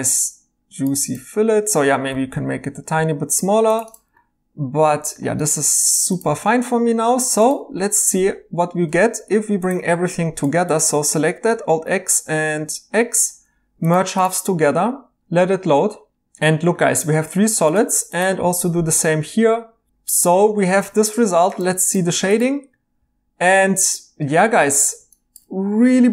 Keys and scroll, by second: 2.1-2.9 typing, 5.6-7.1 typing, 9.2 alt+z, 11.5 alt+x, 18.5 alt+x, 19.9 e.